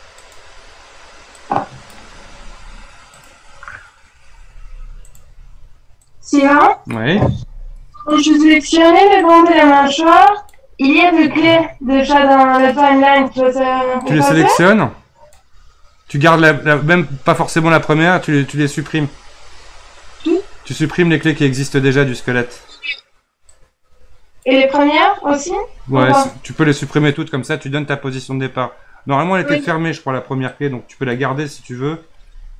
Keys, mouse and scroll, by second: 1.4-2.3 drag, 2.3 r, 4.4 r, 6.0-7.4 drag, 7.4 r, 9.2-11.7 drag, 11.7 r, 14.0-17.0 drag, 23.5-25.4 drag, 25.4 r, 30.5-32.2 drag, 32.2 r.